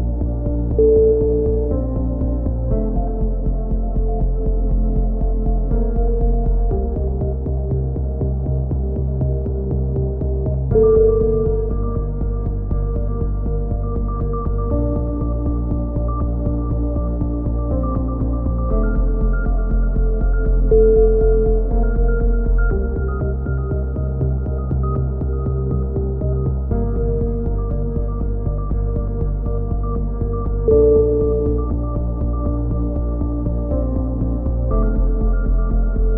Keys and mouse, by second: 0.7-1.9 drag, 1.9 ctrl+KP_7, 2.5-3.8 typing, 5.0 right click, 5.7-7.2 drag, 8.0 a, 8.2 z, 8.3 Tab, 9.2 click, 10.1 middle click, 10.5 click, 11.8 middle click, 12.0 Tab, 12.3 click, 12.9 KP_7, 13.2 z, 14.4 z, 15.7 v, 16.2 z, 17.3 z, 18.6 ctrl+z, 19.1-21.9 drag, 19.2 z, 22.9 KP_7, 23.7 click, 25.2 c, 25.8-27.0 drag, 27.2 a, 27.2 z, 27.5 click, 29.4 click, 29.7 right click, 30.5-31.6 middle drag, 31.0 x, 31.7-32.7 middle drag, 32.9 right click, 33.4 x, 34.3 KP_7, 34.9 z, 35.7 z.